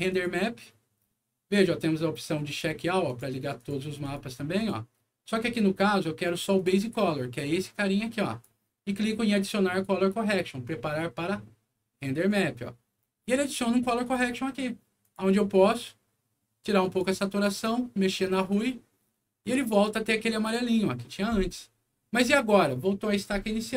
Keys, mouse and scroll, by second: 0.0 click, 2.4 click, 3.0 click, 3.5 click, 4.0 click, 4.5 click, 6.5 click, 7.4-8.4 drag, 12.2 click, 13.4 click, 15.0 click, 16.8 click, 18.2 click, 19.4 click, 19.6 click, 20.2 click.